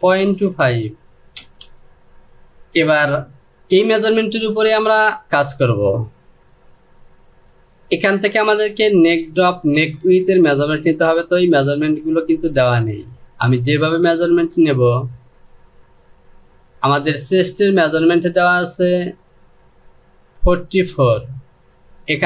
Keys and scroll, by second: 0.0 KP_2, 0.3 KP_5, 1.0 Return.